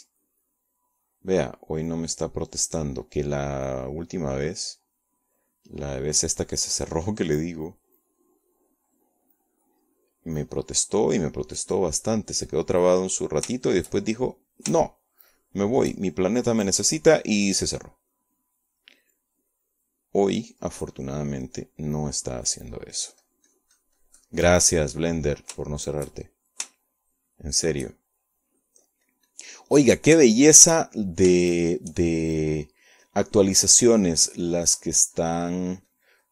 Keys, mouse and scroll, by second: 2.1-3.3 drag, 3.6 click, 4.7 click, 5.2-6.4 middle drag, 5.3-6.4 drag, 6.5 click, 6.5 middle click, 7.6-8.7 drag, 8.9-10.7 drag, 11.0 click, 11.9 click, 12.9 click, 14.0 click, 14.5 click, 14.9 click, 15.7-16.9 shift+drag, 17.7 shift+click, 18.3 shift+click, 19.1 click, 20.1 click, 21.1 click, 21.8 click, 22.4 click, 23.0 click, 24.9-27.7 drag, 27.8 shift+click, 28.9-30.1 shift+drag, 30.5 click, 31.0-32.2 drag, 32.4 shift+click, 33.6 shift+click, 34.6-36.1 drag.